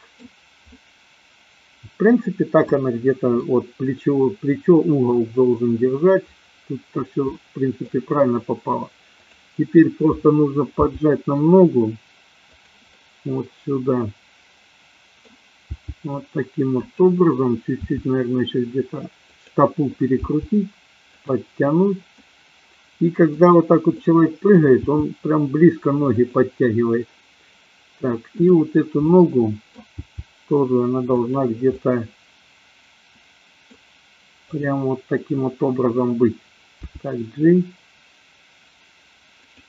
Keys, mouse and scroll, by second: 0.7-3.5 middle drag, 7.3-8.0 shift+middle drag, 10.8 g, 13.0-15.3 middle drag, 15.6 g, 16.8 click, 17.8 r, 20.3 g, 21.2 click, 22.2-23.3 middle drag, 24.0 middle click, 25.0 g, 26.2 click, 29.1 middle click, 30.1 g, 31.7-33.7 middle drag, 34.5 click, 37.0 g.